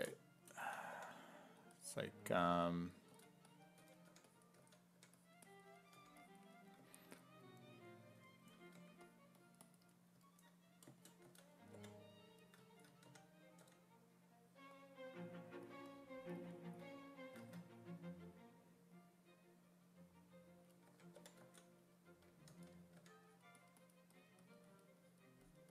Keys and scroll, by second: 0.6 s, 0.9 5, 3.1-5.5 typing, 8.8 1, 11.3 s, 11.8 5, 13.1 w, 13.6 w, 20.7-23.0 typing.